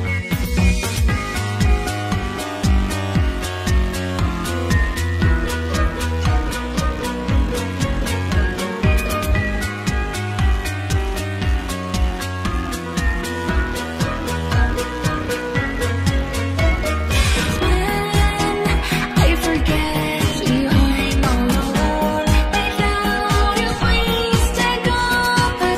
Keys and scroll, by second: 25.4 s.